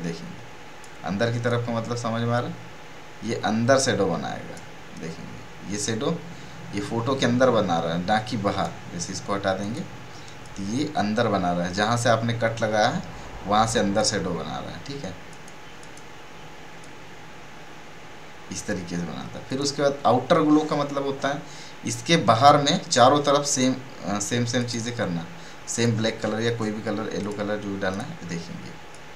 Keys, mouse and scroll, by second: 23.5 click.